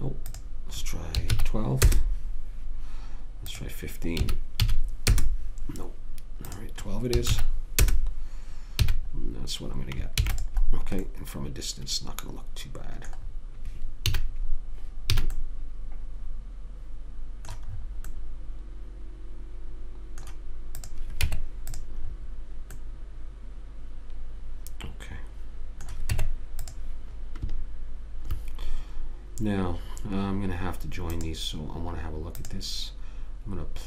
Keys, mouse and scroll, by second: 0.6 click, 3.8 click, 6.8 click, 9.1 a, 10.5 ctrl+s, 10.5-13.5 middle drag, 14.5 a, 15.5 a, 21.1 click, 21.6 Tab, 26.4 Tab, 27.1 Tab, 31.4-33.8 drag.